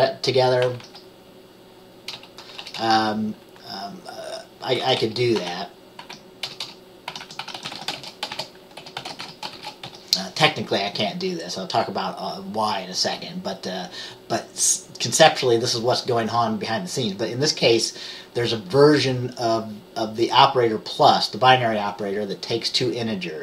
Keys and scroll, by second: 8.9-10.0 typing.